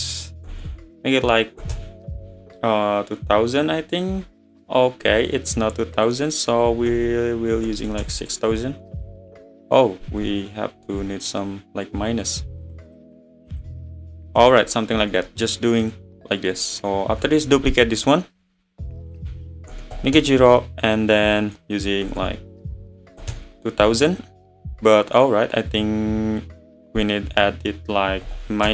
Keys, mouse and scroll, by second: 0.6 BackSpace, 2.6 `, 3.7 `, 6.0-7.0 drag, 7.0 BackSpace, 7.8 BackSpace, 9.6-12.6 drag, 12.7-14.3 drag, 14.3-15.1 middle drag, 15.1 click, 15.3-15.8 middle drag, 15.8 click, 16.8 click, 17.5 shift+d, 17.8-18.1 scroll down 10, 19.2-22.2 drag, 22.2 BackSpace, 25.7-28.7 drag.